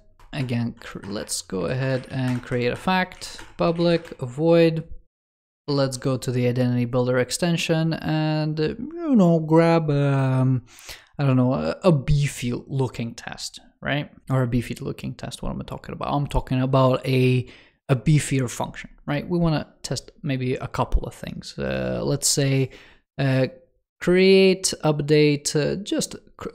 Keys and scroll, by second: 5.2 shift+super+[.